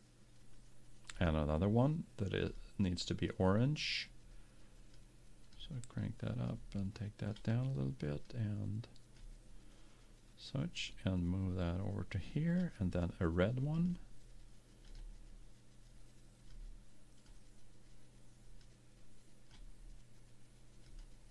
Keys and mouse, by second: 1.3-4.3 drag, 10.9-12.7 drag, 12.9 click, 13.9-16.7 drag.